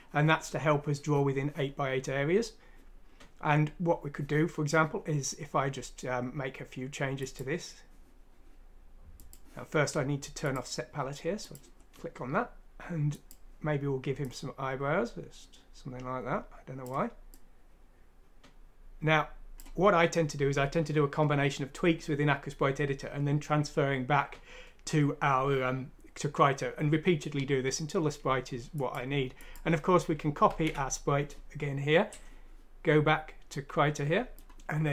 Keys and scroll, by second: 30.4 ctrl+c.